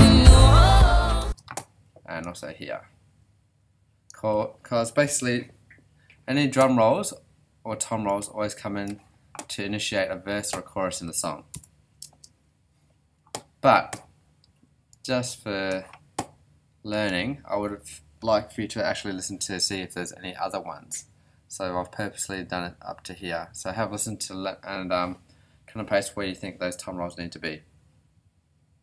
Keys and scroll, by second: 1.2 space, 1.8 alt+space, 11.5 Return, 12.0 space, 13.7 space.